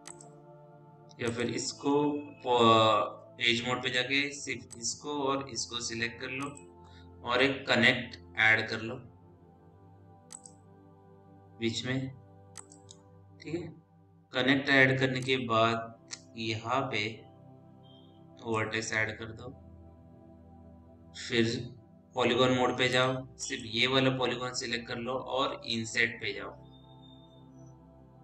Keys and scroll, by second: 3.5 2, 22.6 4.